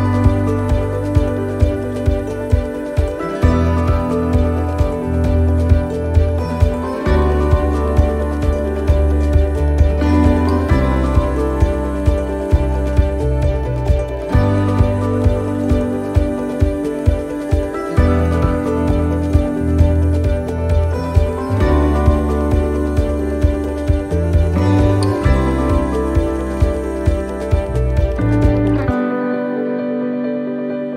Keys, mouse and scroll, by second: 0.0-0.5 scroll down 2, 0.4 middle click, 1.5 click, 3.1 scroll up 1, 4.1 right click, 5.2 l, 6.0 middle click, 6.2 shift+middle click, 7.9 click, 10.8 click, 12.8 middle click, 15.0 click, 16.2 middle click, 16.9 right click, 18.0 l, 18.5 middle click, 19.5 click, 21.7 click, 25.8 click, 27.1 shift+middle click, 27.6 middle click, 28.1 shift+middle click, 28.6 right click, 30.8 l.